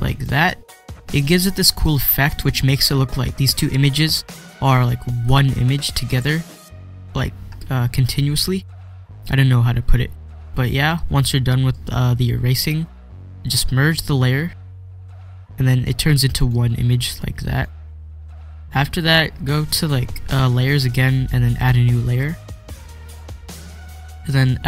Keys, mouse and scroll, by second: 3.3 ctrl+scroll down 1, 7.3 scroll down 1, 7.6-8.0 scroll up 1, 9.7-10.3 scroll down 1, 11.8 typing, 14.5 click, 17.5 click, 18.7 click, 22.5 click, 23.2 click.